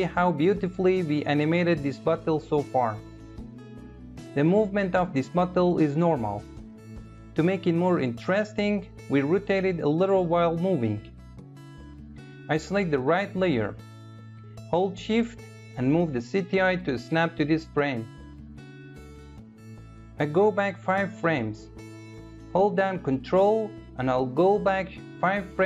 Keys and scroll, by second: 22.8 ctrl+Left.